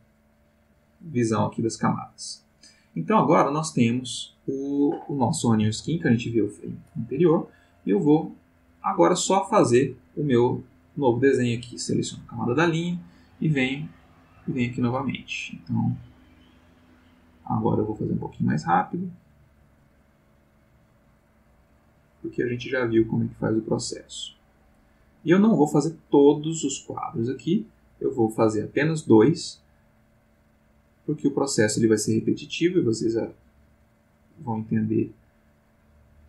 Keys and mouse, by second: 0.2 click, 0.6 click, 7.9 click, 10.5 click, 14.0-36.2 drag.